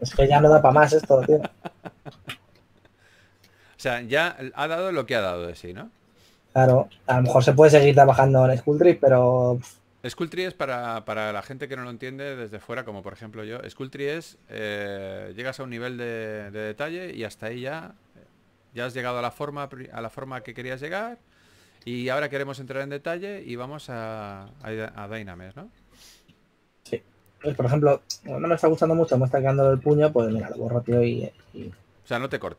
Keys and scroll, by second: 1.0 4, 2.3 super+z, 8.3-9.2 typing, 11.1 typing, 17.7 typing, 18.9 super+z, 23.4 s, 25.9 s, 29.3-31.0 typing.